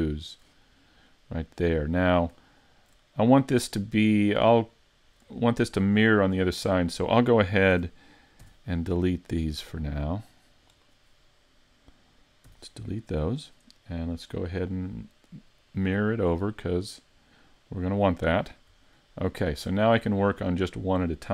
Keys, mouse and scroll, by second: 0.2 right click, 0.7 middle click, 2.5 shift+middle click, 4.8 shift+middle click, 5.4 middle click, 7.7 a, 8.4 c, 12.5 x, 14.4 click, 17.7 click, 19.0 shift+middle click, 19.5-20.9 scroll up 3, 19.9 shift+middle click, 21.2 middle click.